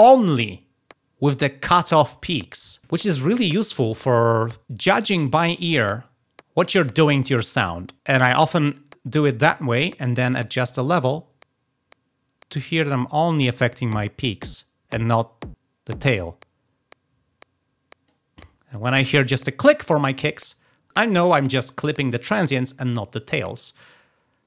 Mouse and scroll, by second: 10.4 click, 23.4-23.8 drag.